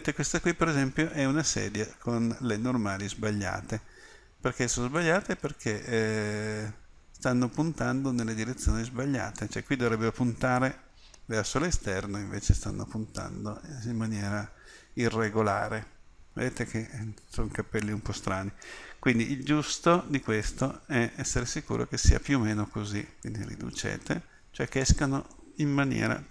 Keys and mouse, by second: 1.3 middle click, 5.0-7.5 drag, 11.5 middle click, 13.5-15.0 middle drag, 20.4-22.5 middle drag, 23.2-25.3 middle drag.